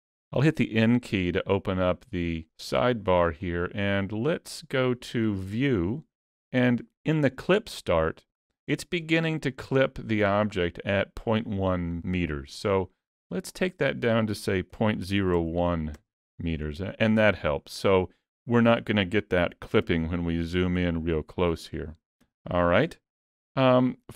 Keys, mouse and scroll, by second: 0.8 n, 3.4 click, 13.6 click, 19.9 KP_Decimal, 22.2 n, 23.2 shift+middle click, 23.5 shift+scroll up 1, 23.8 middle click.